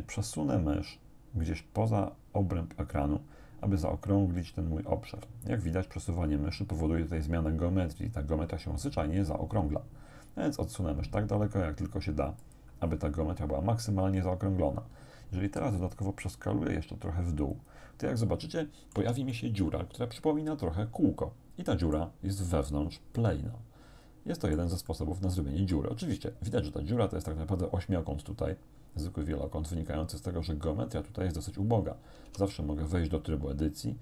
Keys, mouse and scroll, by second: 12.5 click, 15.5 s, 17.5 click, 18.2-19.2 drag, 19.0 Tab, 19.3-22.2 drag, 23.2-24.8 drag, 24.9-25.9 drag, 32.3 Tab.